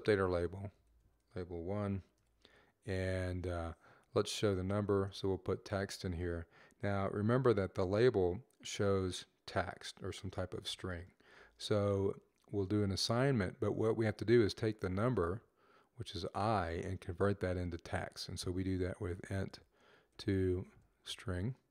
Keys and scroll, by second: 0.0-2.0 typing, 3.2 typing, 4.6 typing, 11.1 shift+;, 14.7 typing, 18.7-21.7 typing.